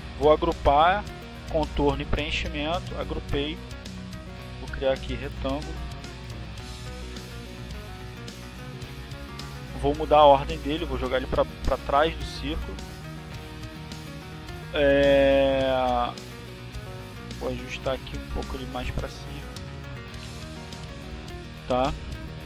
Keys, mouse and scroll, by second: 0.4 click, 1.5 click, 4.6 shift+click, 6.3 click, 7.1 click, 7.8 click, 8.5-11.7 typing, 14.9 click, 19.6-20.6 drag, 21.1 click, 22.0 click.